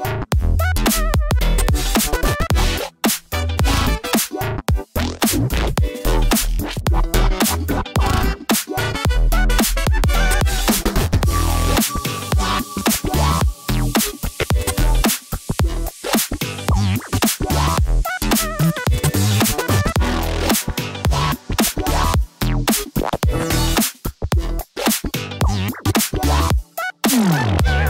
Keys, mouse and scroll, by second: 0.4 click, 1.4 r, 1.7 x, 4.1 click, 4.1-4.9 typing, 5.9 click, 6.6-7.9 middle drag, 7.5 typing, 8.8 l, 9.4 middle click, 10.9 s, 11.6 y, 13.4 click, 13.9 g, 14.0 y, 15.0 click, 15.7 click, 16.2 middle click, 16.9 Tab, 17.4 middle click, 18.2-20.1 drag, 20.5 middle click, 21.4-23.9 drag.